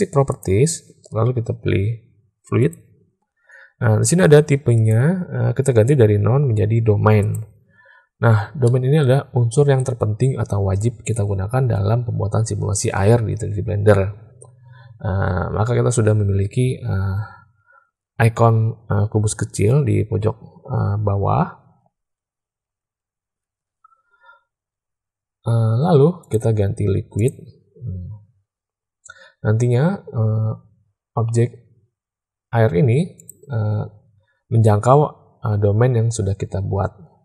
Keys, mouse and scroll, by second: 0.2 click, 2.6 click, 4.8-7.3 drag, 8.6-9.0 middle drag, 26.1-27.3 drag, 33.1 click.